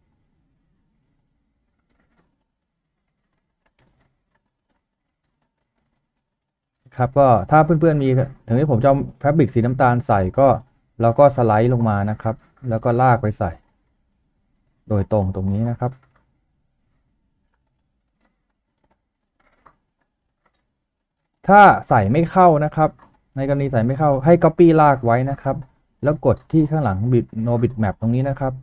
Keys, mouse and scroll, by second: 3.3-5.5 typing, 5.9 double click, 10.6-10.9 scroll up 1, 18.3 scroll up 1, 24.0 right click, 25.0 typing.